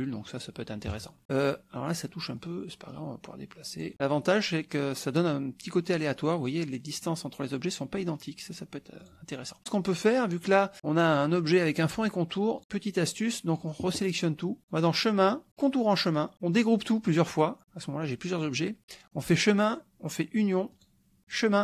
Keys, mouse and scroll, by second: 0.3 click, 0.9 KP_Subtract, 1.9 click, 2.4-3.9 drag, 9.0 click, 12.6-13.8 drag, 14.6 click, 15.6 click, 17.1 click, 19.2 click, 20.7 click, 21.2 click.